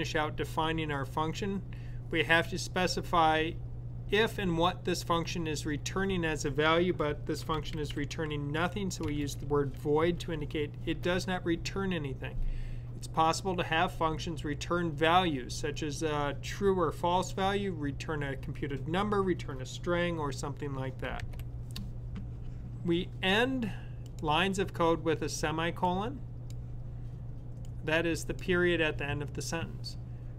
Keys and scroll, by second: 7.2-8.2 typing, 9.8 typing.